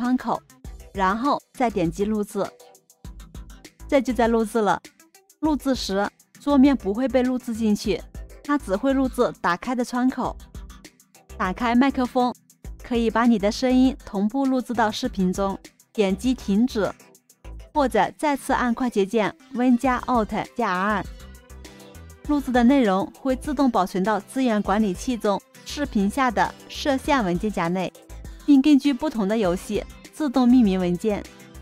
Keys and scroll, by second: 19.7 alt+super+r.